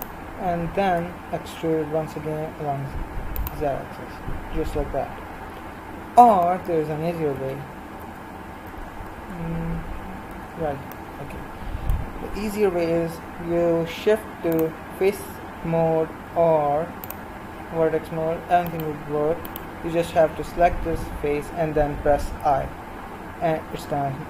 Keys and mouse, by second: 1.0 e, 7.4 ctrl+z, 8.1 ctrl+z, 9.2 ctrl+z, 10.2 ctrl+z, 11.0-13.0 middle drag, 18.3-19.5 drag, 18.6-22.4 right drag, 22.4 i.